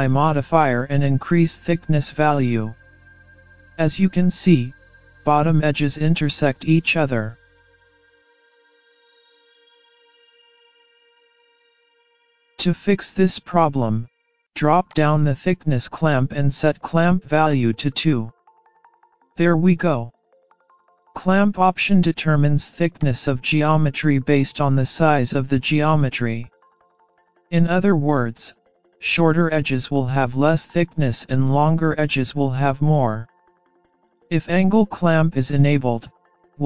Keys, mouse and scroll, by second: 0.7 click, 12.2-13.1 scroll up 1, 14.9 click, 17.6 click, 23.1 click.